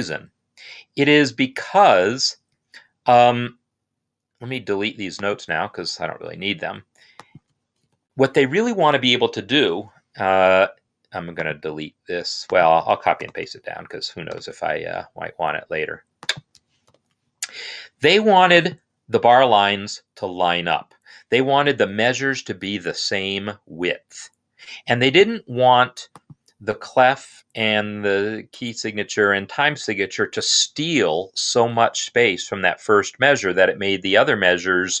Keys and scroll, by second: 7.6 BackSpace, 13.1 ctrl+c, 14.2 ctrl+x, 16.8 ctrl+v.